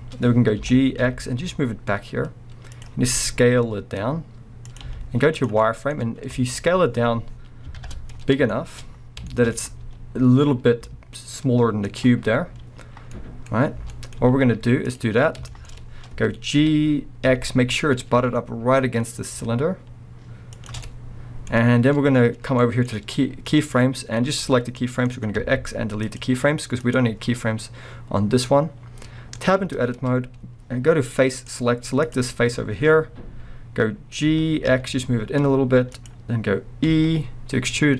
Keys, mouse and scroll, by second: 0.2-0.6 scroll, 0.6 g, 2.8 click, 3.1 s, 4.8 click, 5.6-9.6 middle drag, 6.6 scroll, 8.8 scroll, 9.6 scroll, 9.8 s, 12.0 click, 12.2 scroll, 13.1-13.4 middle drag, 13.5-13.9 scroll, 14.1-20.7 middle drag, 14.2 z, 15.7 scroll, 16.6 g, 20.8-23.5 middle drag, 23.5-24.8 drag, 24.7 scroll up 1, 24.8-26.8 middle drag, 25.4 x, 26.8 click, 29.0-29.4 scroll down 1, 29.4-31.4 middle drag, 29.6 scroll up 1, 29.7 b, 30.4 scroll up 1, 31.4 click.